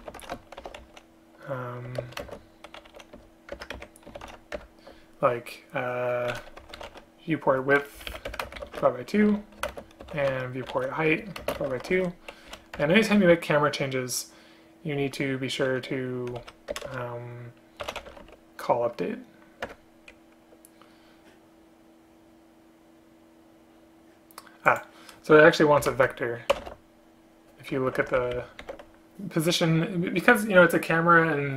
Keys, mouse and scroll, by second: 2.1 ctrl+BackSpace, 2.3 ctrl+space, 3.7 Return, 4.7 Return, 8.1 Down, 8.2 Down, 8.3 Return, 8.5 space, 8.7 space, 9.7 space, 11.3 Return, 11.5 space, 11.7 space, 12.6 space, 12.8 End, 12.8 Return, 16.8 BackSpace, 16.9 BackSpace, 19.7 Return, 26.0 space, 28.0 Home, 28.3 ctrl+Right, 28.4 ctrl+Right, 28.7 ctrl+q.